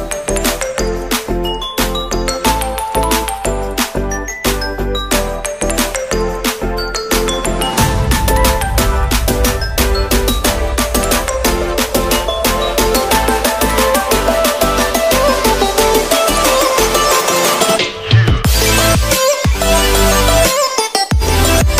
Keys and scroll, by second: 13.3 ctrl+a, 14.1 ctrl+c, 15.0 ctrl+Tab, 16.8 ctrl+v, 18.5 ctrl+t.